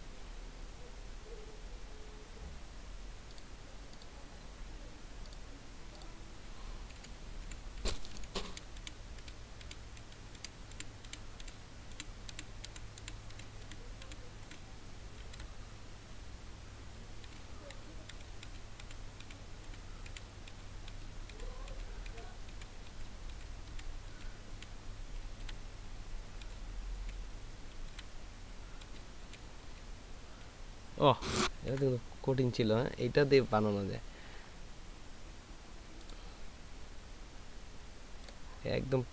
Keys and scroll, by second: 7.3 Down, 7.4 Down, 7.8 Down, 8.1 Down, 8.5 Down, 8.8 Down, 15.3 Up, 17.2 Down, 17.7 Down, 18.1 Down, 18.4 Down, 18.8-19.2 Down, 20.1 Down, 25.4 Up, 26.4 Down, 27.0 Down, 27.9 Up, 28.8 Down, 29.2 Down, 29.6 Down, 31.7 Up.